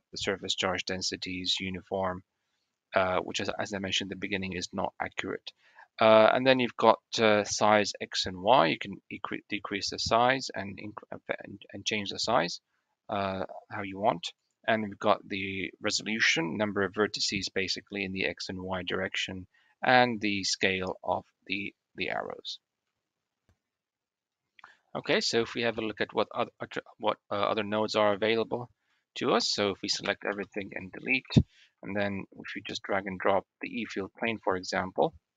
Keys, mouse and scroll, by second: 8.3-9.5 drag, 12.3 click, 14.2-19.3 middle drag, 20.9-21.5 shift+drag, 22.2 shift+middle click, 25.0 middle click, 25.7-26.1 shift+middle drag, 28.0-28.7 shift+middle drag, 29.5 click, 29.9 a, 30.2 x, 31.2-31.5 shift+middle drag.